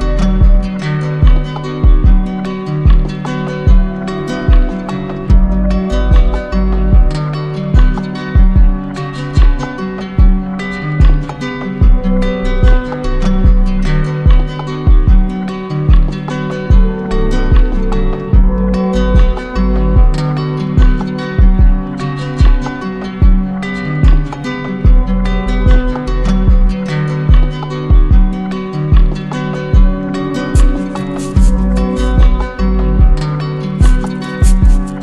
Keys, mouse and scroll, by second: 8.1 click, 12.0 click, 13.0 click, 15.5 z, 16.7-17.7 drag, 19.3 click, 19.5 click, 20.8 click, 23.9 click, 24.1 click, 32.1 click, 32.5 ctrl+z.